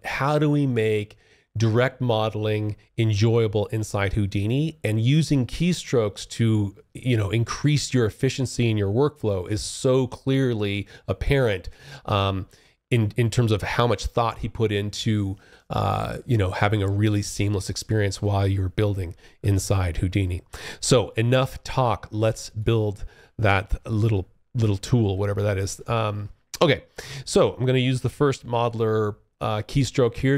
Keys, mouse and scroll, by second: 20.4 alt+click, 21.9 alt+middle click, 22.5 alt+click, 24.3 alt+click, 24.9 alt+middle click, 29.3 alt+q.